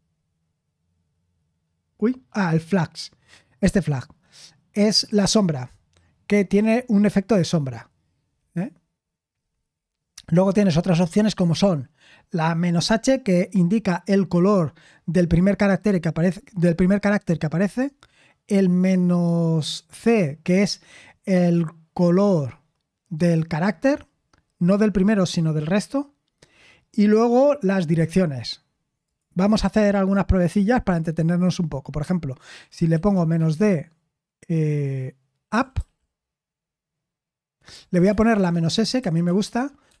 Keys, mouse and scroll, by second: 8.3-9.5 scroll down 1, 9.5-15.3 scroll down 1, 29.0-40.0 drag.